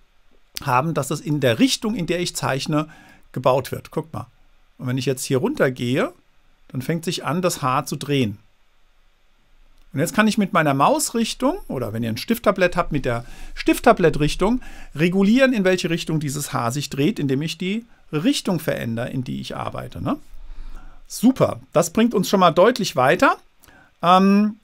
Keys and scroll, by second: 17.2 super+z.